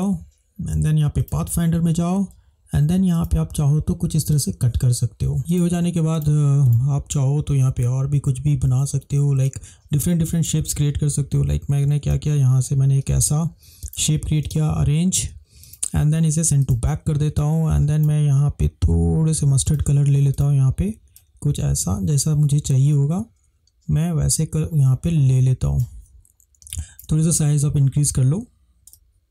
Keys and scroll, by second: 26.7 space.